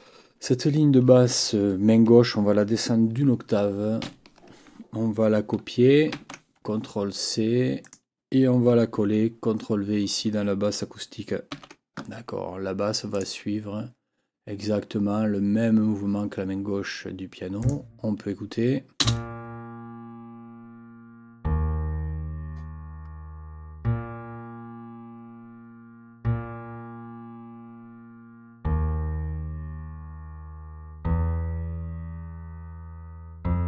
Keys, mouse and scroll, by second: 4.0 ctrl+Down, 6.1 ctrl+c, 7.8 click, 11.5 ctrl+v, 13.1 click, 17.6 click, 19.0 space.